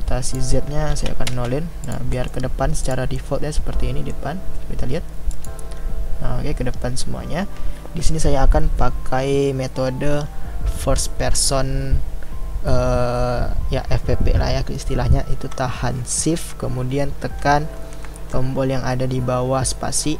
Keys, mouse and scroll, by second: 1.3 click, 2.2-2.9 middle drag, 2.9 click, 3.2-5.3 middle drag, 5.3 click.